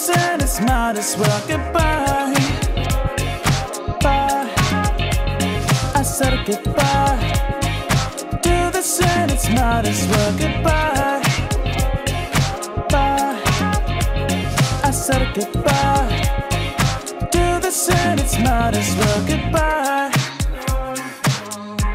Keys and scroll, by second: 10.5 ctrl+j.